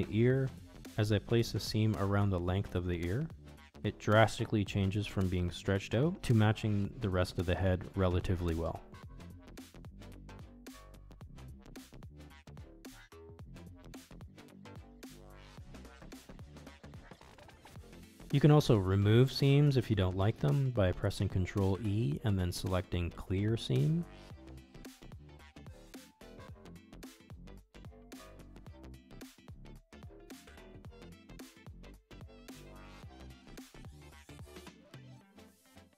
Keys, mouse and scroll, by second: 0.1 shift+click, 0.6 middle click, 1.2 ctrl+e, 2.7 middle click, 4.9-6.3 middle drag, 7.8 middle click, 8.6 middle click, 9.1 shift+click, 9.7 middle click, 11.3 shift+click, 12.3 shift+click, 13.1 middle click, 15.3 shift+click, 16.1 ctrl+e, 18.2-19.7 middle drag, 20.8 alt+click, 21.7 alt+shift+click, 23.5 ctrl+e, 25.9-27.5 middle drag, 28.2 ctrl+shift+z, 29.8 ctrl+z, 31.9 middle click, 33.2 middle click, 33.4 ctrl+z, 33.5 middle click, 33.9 ctrl+e.